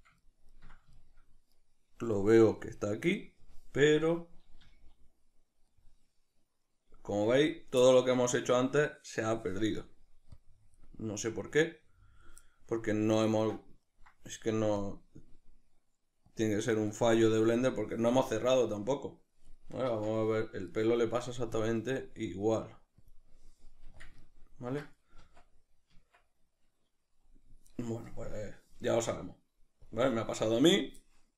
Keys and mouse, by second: 3.2 click, 3.8-11.7 middle drag, 5.0 z, 11.7 click, 12.4-16.4 middle drag, 16.4 click, 20.1 Tab, 20.7-23.1 right drag, 23.1 click, 26.1 Tab, 26.1-29.9 middle drag, 29.9-31.3 drag.